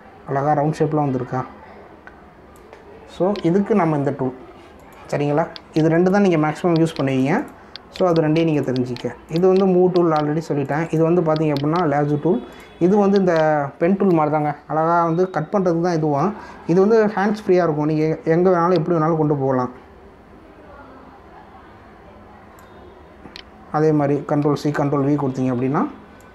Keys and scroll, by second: 25.4 ctrl+c, 25.7 ctrl+v.